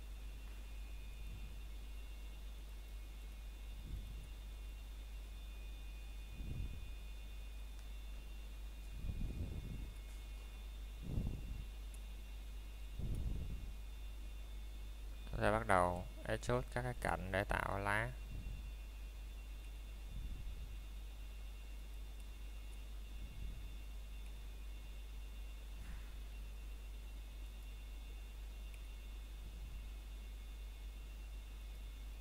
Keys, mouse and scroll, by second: 0.1 click, 8.4 ctrl+z, 15.9 click, 17.3 alt+click, 17.8 middle click, 18.0 scroll down 1, 18.5 middle click, 18.8 scroll up 1, 19.6 shift+middle click, 20.0-20.4 scroll down 1, 20.4 middle click, 21.3 i, 31.2 click, 31.6 scroll down 1, 32.0 middle click.